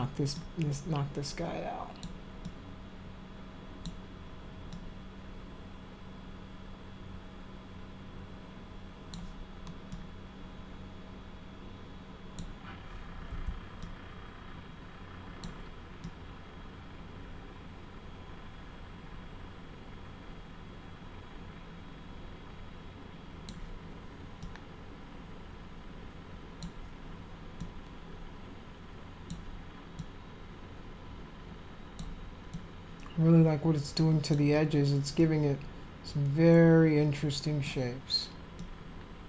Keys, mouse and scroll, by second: 0.4-2.0 alt+drag, 2.4-3.8 alt+drag, 4.7-9.1 alt+drag, 9.9-12.4 alt+drag, 13.8-15.4 alt+drag, 16.0-23.5 alt+drag, 24.4-26.6 alt+drag, 27.6-29.3 alt+drag, 30.0-32.0 alt+drag, 32.5-34.3 alt+drag, 35.2-37.6 alt+drag, 38.6-39.2 alt+drag.